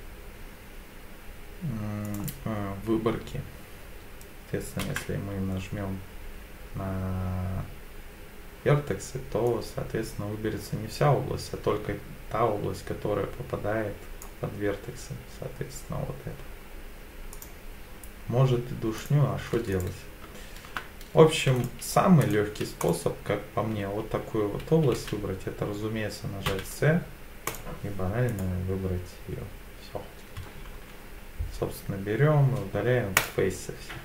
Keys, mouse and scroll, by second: 2.0 click, 4.8 b, 17.3 click, 19.0 click, 19.7 click, 21.6-22.8 right drag, 22.8 click, 24.9 v, 26.5 c, 28.3 right click, 30.8 x.